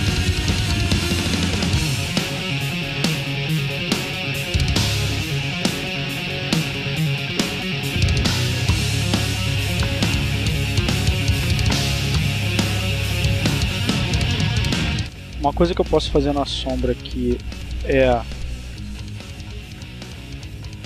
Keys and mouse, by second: 0.1 click, 1.6-3.8 drag, 5.4-6.6 drag, 6.8-9.5 drag, 11.1 click, 11.8 click, 15.3 click, 16.1 click, 18.5-20.8 drag.